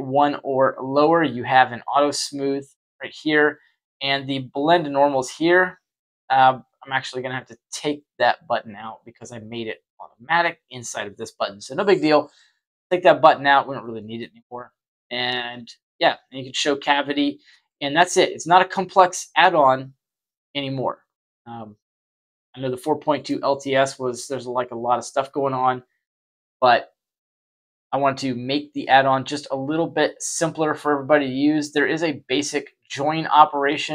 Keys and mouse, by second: 5.7 click, 6.4 click, 6.8 click, 13.7-14.1 middle drag, 15.8 click, 16.5 click, 16.9 click, 18.0 shift+middle click, 22.2-23.2 middle drag.